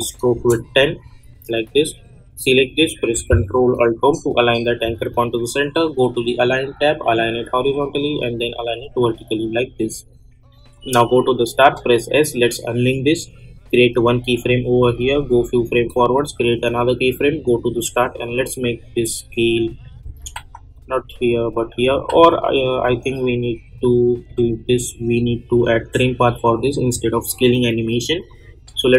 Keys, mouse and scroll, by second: 0.3 Return, 1.0 click, 4.0 ctrl+alt+Home, 6.2 click, 11.6 s, 12.9 click, 14.8 space, 16.4-20.3 drag, 20.3 ctrl+z, 20.7-22.1 drag, 22.1 ctrl+z, 22.7-25.1 drag.